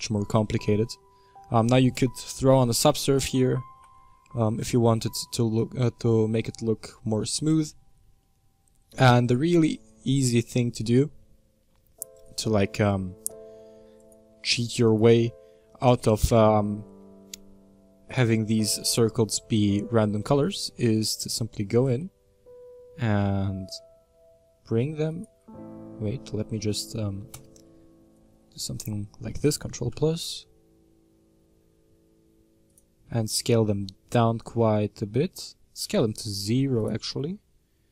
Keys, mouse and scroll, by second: 2.4 ctrl+1, 3.3 ctrl+2, 3.9-7.0 middle drag, 7.7-8.2 scroll up 3, 8.2-12.2 middle drag, 12.2 click, 13.0-13.3 scroll down 3, 14.2-15.1 drag, 15.5-17.3 scroll up 1, 18.0 right click, 19.0-20.7 middle drag, 20.7-21.9 scroll up 2, 21.9 g, 27.3 KP_Add, 29.9 g, 33.0 s, 36.9-37.9 scroll down 3.